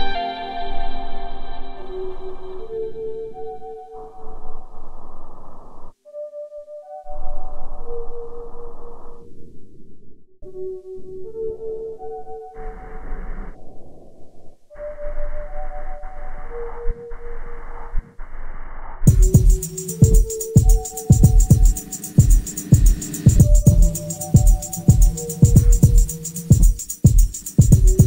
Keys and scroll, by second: 1.0 ctrl+d, 1.1 Escape, 6.7 F1, 10.1 F9, 11.8 ctrl+d, 11.9 Escape, 17.0 3, 17.3 [, 18.2 ], 24.0 ctrl+d, 24.1 Escape, 24.9 Escape.